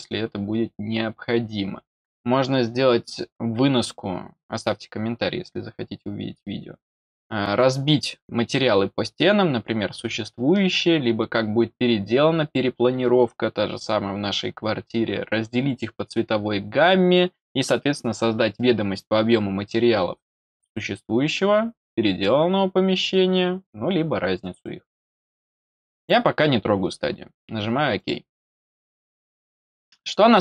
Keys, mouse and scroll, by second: 25.9 click, 27.9 click, 29.8-30.4 scroll down 2.